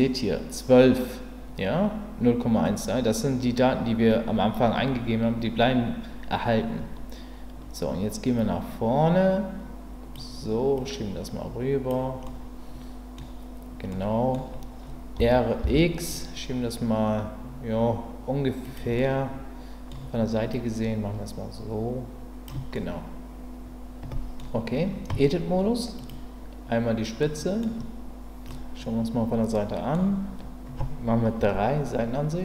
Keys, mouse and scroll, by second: 8.3-10.1 drag, 10.8-11.9 drag, 12.2-13.2 middle drag, 13.9-14.5 scroll up 1, 15.2 r, 15.6 x, 18.6 click, 18.9-19.9 middle drag, 20.5-22.4 drag, 22.7-23.6 scroll up 1, 23.6-24.3 scroll up 1, 24.3-25.1 middle drag, 25.1 Tab, 26.0 click, 27.2 middle click, 28.5-29.9 middle drag, 31.4 KP_3.